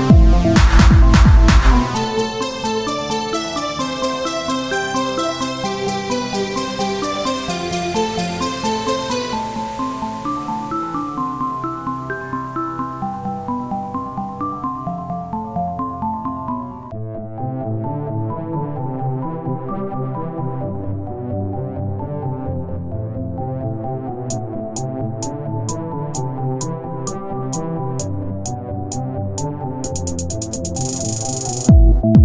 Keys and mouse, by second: 0.7 t, 1.1 z, 1.5 s, 2.3 Tab, 3.2 z, 4.6-6.1 drag, 6.3 Tab, 7.2 KP_1, 7.5 z, 8.8 z, 9.0 right click, 11.5-12.7 right drag, 12.2-15.9 drag, 12.7-15.9 right drag, 16.2 right click, 16.3 Tab, 18.5 ctrl+r, 21.7 click, 22.3-26.6 drag, 25.3 ctrl+b, 27.7 ctrl+r, 29.6-32.2 drag.